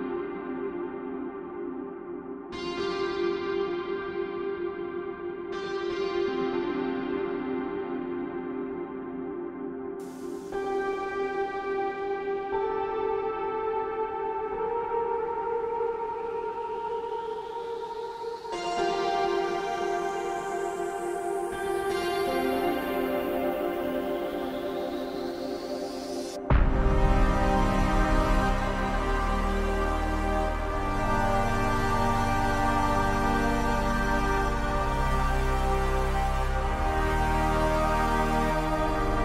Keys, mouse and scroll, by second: 0.6 a, 1.4 g, 2.9 click, 5.4 click, 7.0 click, 9.0 click, 10.2 click, 11.7 click, 14.3 Tab, 15.1-15.6 scroll up 4, 15.6-16.0 scroll down 1, 16.1 Tab, 17.8 click, 25.5 f, 32.8-35.6 scroll down 5, 35.6 click, 38.5 click.